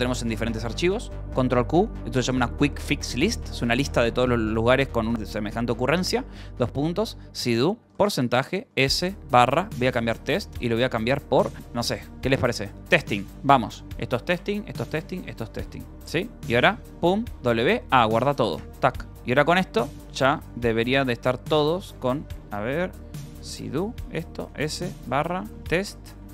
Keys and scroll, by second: 0.2 ctrl+n, 1.8 ctrl+q, 3.2-5.1 typing, 6.4-11.2 typing, 12.7 i, 13.3 Return, 13.8 n, 16.7-18.1 typing, 18.5 Return, 19.0 Escape, 19.1 Return, 19.7-26.3 typing, 21.9 Return.